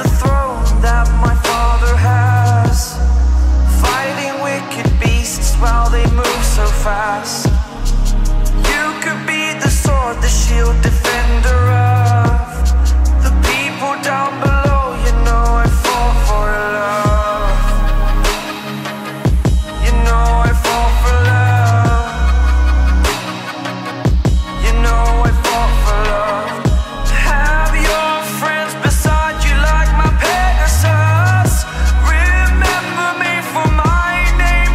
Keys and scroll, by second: 1.3 ctrl+t.